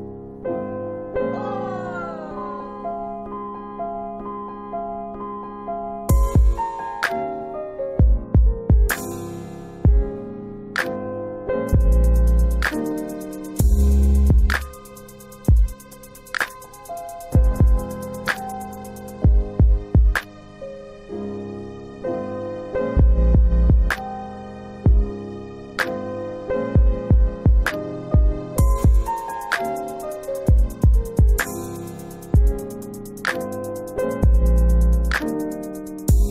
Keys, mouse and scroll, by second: 0.4-1.3 scroll up 1, 2.2 scroll, 2.3 click, 9.0 click, 14.6 click, 16.5 click, 17.9 ctrl+click, 19.4 click, 20.3 ctrl+z, 24.2 click, 25.7 ctrl+click, 28.2 click, 29.3 ctrl+click, 33.1 ctrl+click, 35.5 scroll up 1, 35.7 middle click, 36.1 scroll down 1, 36.2 scroll up 1.